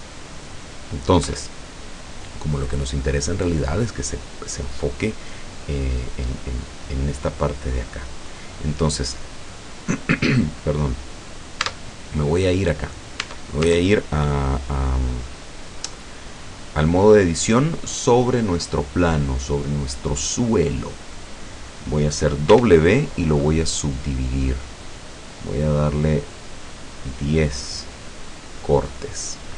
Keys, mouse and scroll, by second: 1.3 Escape, 8.3 right click, 9.0 middle click, 9.7 click, 10.0 scroll down 2, 10.6 middle click, 11.3 scroll down 2, 11.7 Tab, 13.3 Tab, 22.5 w, 24.0 click, 26.0-27.0 drag.